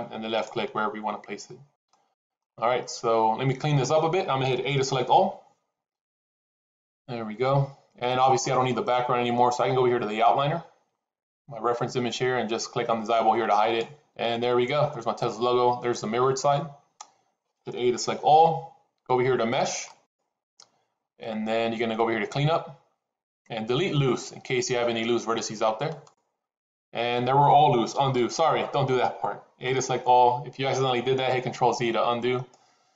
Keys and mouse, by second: 1.8 shift+middle click, 5.0 a, 13.4 click, 18.0 a, 20.0-25.9 drag, 28.0 ctrl+z, 29.6 a.